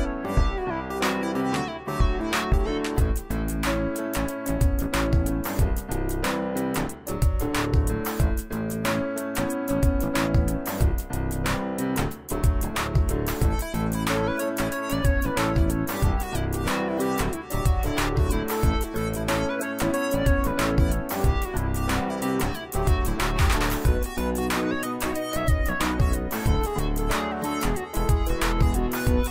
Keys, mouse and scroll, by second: 0.0 alt+click, 0.4 space, 1.3 click, 2.3 right click, 3.3 click, 3.9 space, 4.0-4.6 click, 4.4 space, 5.0 click, 5.8 shift+click, 10.3 space, 10.8-11.4 click, 10.8 space, 11.3 space, 11.5-16.5 drag, 16.2-17.0 typing, 20.1-20.8 typing, 24.2-24.9 typing, 24.3 click, 24.4 click, 25.1 right click, 26.2 click, 27.1 z, 27.2 click.